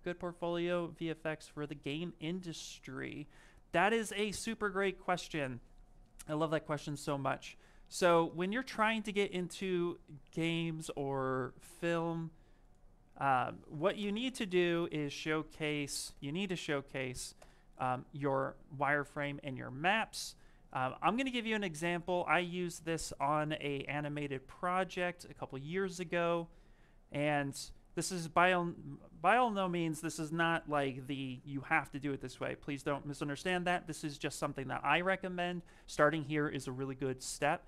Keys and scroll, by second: 15.3-16.7 typing, 17.2 Return.